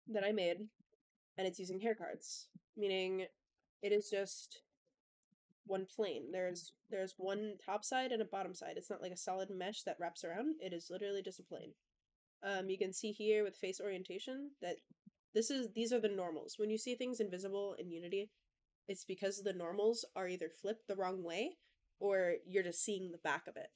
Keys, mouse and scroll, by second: 0.0 click, 0.4 middle drag, 0.8 shift+middle drag, 1.2-1.5 scroll up 2, 1.5 click, 1.7 Tab, 2.0 middle click, 3.1 click, 3.8 ctrl+l, 4.4 shift+d, 4.7 y, 5.1 click, 5.3 shift+middle click, 5.6-6.2 middle drag, 6.3 click, 6.4 Tab, 6.7 middle drag, 7.0 scroll up 1, 7.1 shift+middle drag, 7.4 click, 7.6 middle click, 7.7-8.4 drag, 8.4 middle drag, 8.6-9.3 drag, 9.3 middle click, 9.3 drag, 10.2-11.4 middle drag, 12.4 click, 13.6-14.3 middle drag, 14.3-14.6 scroll up 1, 14.7-15.6 shift+scroll down 3, 14.7 shift+middle drag, 15.4 click, 15.6 middle drag.